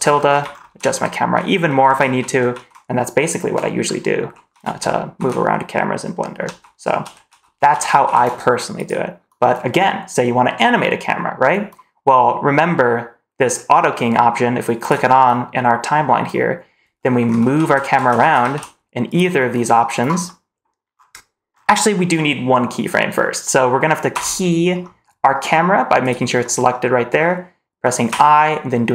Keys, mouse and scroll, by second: 14.7 click, 17.0 shift+`, 20.1 middle click, 20.8 scroll up 1, 21.4 scroll down 2, 21.7 middle click, 24.0 i, 25.9 click, 28.0 i.